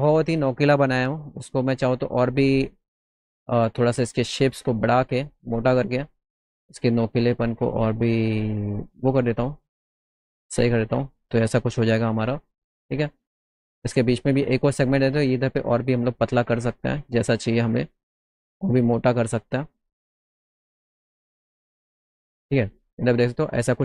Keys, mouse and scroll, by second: 0.8 middle click, 1.7 middle click, 2.8 click, 3.4 middle click, 4.6-6.7 drag, 7.4 click, 8.2-9.4 drag, 9.6 middle click, 10.1 alt+middle click, 12.2 middle click, 12.4 middle click, 12.7 middle click, 14.0 alt+middle click, 16.6 click, 16.9 middle click, 17.0 middle click, 17.3 middle click, 19.3 alt+middle click, 20.7 alt+middle click, 21.7 middle click, 22.4 middle click, 22.8 alt+middle click, 23.6 middle click.